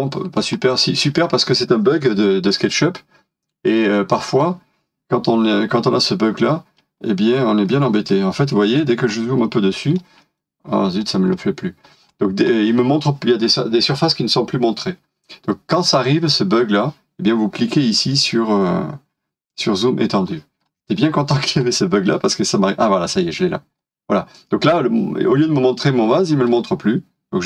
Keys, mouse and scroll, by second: 0.5-2.5 scroll down 1, 2.5 middle click, 7.0 scroll down 1, 7.7 middle click, 8.7 scroll up 1, 9.4 middle click, 10.4 scroll up 1, 10.7 scroll down 1, 11.2 scroll down 1, 12.0 scroll up 1, 14.1 scroll down 1, 20.6 scroll up 1, 21.3-21.9 scroll down 1, 21.9 middle click.